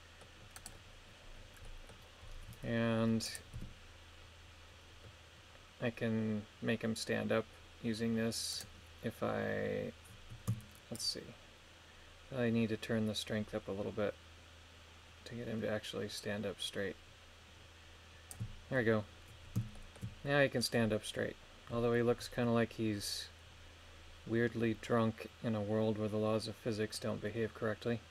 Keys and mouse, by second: 0.6 right click, 1.6 middle click, 3.3 click, 3.6 r, 8.5-10.5 right drag, 11.0-18.3 shift+drag, 19.7 shift+middle click.